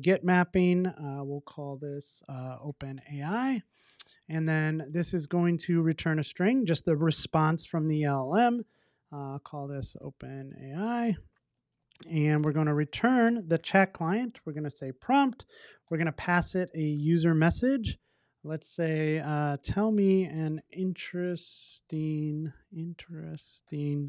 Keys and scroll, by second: 0.0 Return, 13.7 Return.